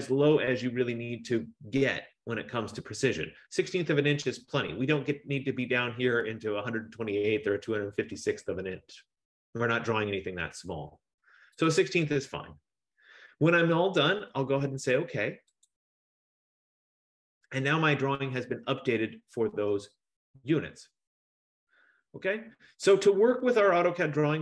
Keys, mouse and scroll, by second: 11.8 click, 15.8 click.